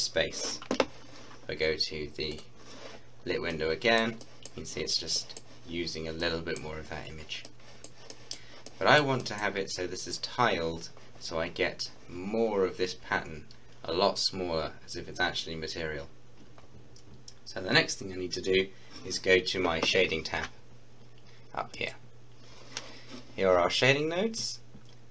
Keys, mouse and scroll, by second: 2.3 click, 3.0-3.5 scroll up 1, 3.6-9.2 middle drag, 11.6-12.7 scroll up 1, 12.7-13.4 scroll down 1, 16.6-18.3 scroll down 1, 21.7 click.